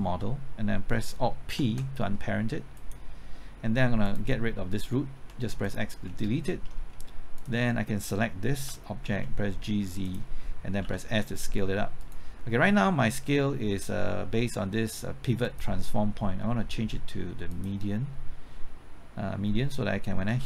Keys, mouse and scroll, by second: 1.2 typing, 1.5 alt+p, 2.7 click, 5.1 x, 5.6 click, 6.0 scroll down 1, 6.4 shift+middle click, 6.8-7.4 scroll up 1, 7.4 click, 8.6-9.1 typing, 10.0 click, 10.8 typing, 12.0 right click, 15.4-17.7 drag, 19.5-20.3 scroll up 1, 20.3 scroll up 1.